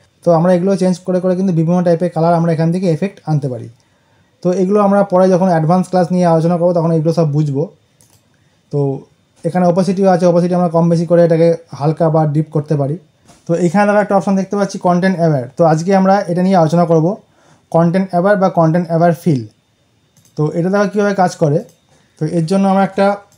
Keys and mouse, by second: 7.9 click, 20.0 click.